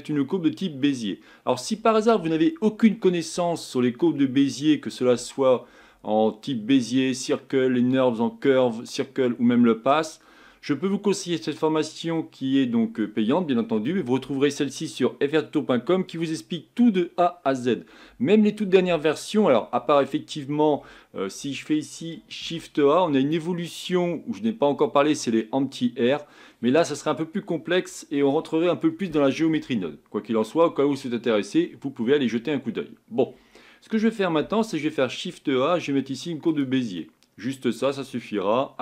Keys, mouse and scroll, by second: 22.4 shift+a, 34.4 shift+a, 37.0-38.4 middle drag, 38.4 scroll up 2.